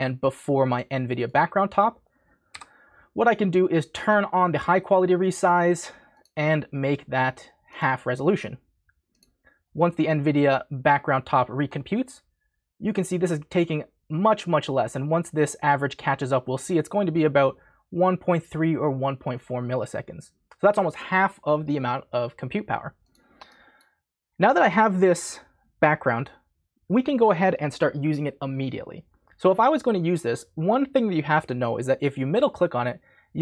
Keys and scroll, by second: 0.0-0.1 typing, 2.2-3.0 typing.